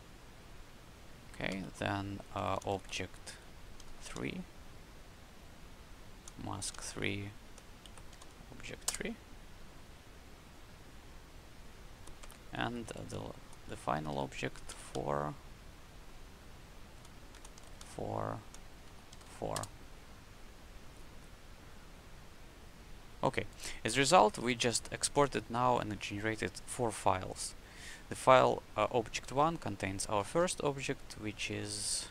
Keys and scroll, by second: 1.4 Up, 2.3 Left, 3.7 Delete, 3.8 3, 4.0 Left, 5.5 Left, 7.3 Left, 8.1 3, 8.8 Return, 12.2 Up, 12.5 Left, 14.0 Right, 14.6 Delete, 16.2 Left, 17.5 Delete, 17.6 4, 18.8 Right, 19.5 Return.